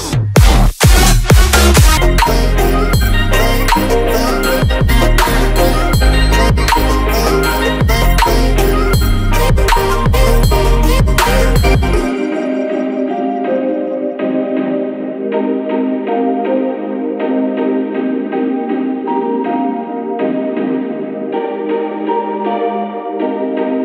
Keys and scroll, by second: 4.1 space.